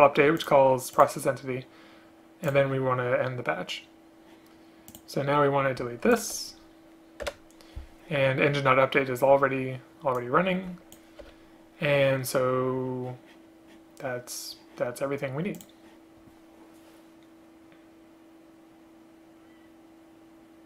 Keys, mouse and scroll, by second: 6.2 shift+click, 7.3 BackSpace, 11.3 BackSpace.